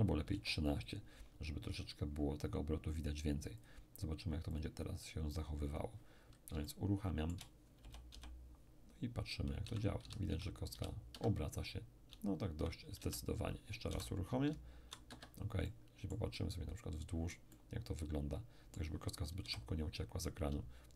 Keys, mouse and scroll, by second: 0.2 1, 0.3 3, 2.9-5.5 drag, 5.7-8.2 drag, 6.6-8.2 shift+middle drag, 7.8 shift+o, 8.1 shift+p, 9.6 d, 10.0 d, 10.2 d, 11.1 Escape, 12.1-14.7 typing, 15.0 Escape, 15.6-17.8 middle drag, 17.8-19.7 drag, 19.4 p, 20.4 d, 20.7 d.